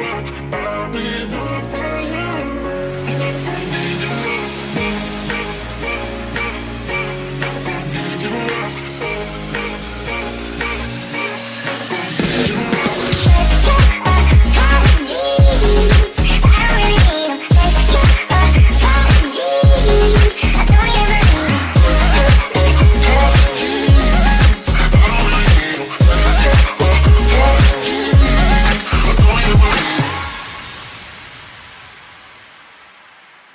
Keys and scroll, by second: 1.7 d, 2.1 a, 8.7 d, 8.9 Escape, 9.1 e, 10.5 3, 10.7 Return, 12.0 ctrl+z, 12.0-14.2 typing, 15.5 d, 17.8 e, 20.1-23.7 typing, 24.3 Escape, 30.0 e, 33.2 a.